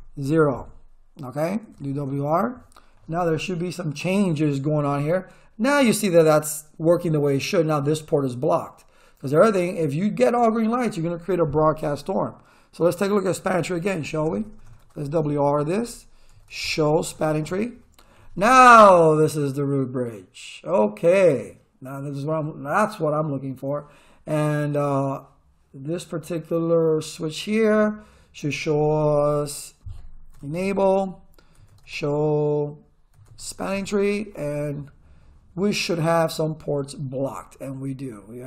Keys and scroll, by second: 1.4-2.4 typing, 13.9 ctrl+z, 14.3 Return, 14.6-17.6 typing, 28.9 Return, 29.0 r, 30.1-33.7 typing.